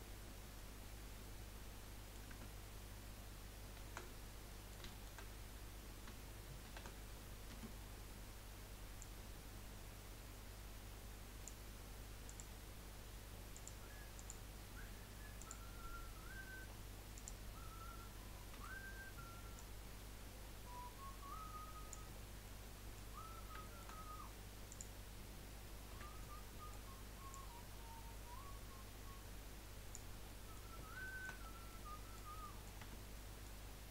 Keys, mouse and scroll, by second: 0.5-2.1 middle drag, 2.1 click, 2.3 Tab, 4.5-6.6 middle drag, 6.6 shift+d, 9.0 click, 16.6-17.0 scroll up 1, 17.1 click, 18.6 l, 19.5 click, 22.1-22.4 scroll down 2, 22.4 middle click, 23.2-23.6 scroll up 1, 23.6 shift+middle click, 23.8-24.7 shift+scroll up 3, 24.7 click, 25.9 l, 26.2-27.3 middle drag, 27.3 click, 30.3 middle click, 30.7-31.2 scroll down 3, 31.2 shift+middle click, 31.4 scroll up 1, 31.7-32.8 middle drag, 32.8 Tab, 33.7-33.9 scroll down 5.